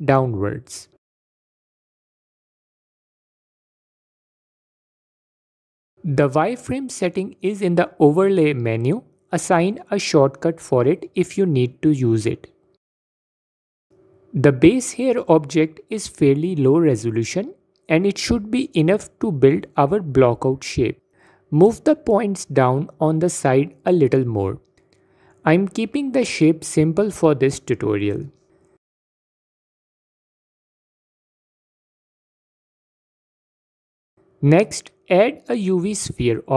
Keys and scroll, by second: 7.2 F4, 16.0 f, 16.8 f, 18.8 f, 22.8 f, 30.9 Tab, 34.8 shift+a.